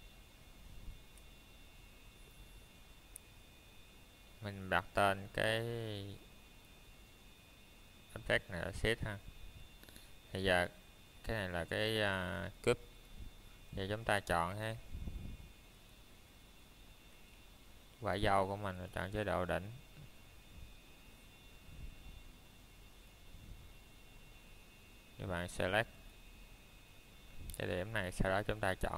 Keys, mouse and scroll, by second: 2.6 click, 3.4 middle click, 4.5 click, 5.0 middle click, 5.2-6.1 scroll down 1, 6.4 shift+middle click, 6.9 scroll up 1, 7.7 middle click, 13.0 middle click, 13.4-14.5 scroll up 1, 14.5 middle click, 15.2 shift+middle click, 24.2 middle click, 24.5 scroll down 1, 24.9 middle click, 26.0 click.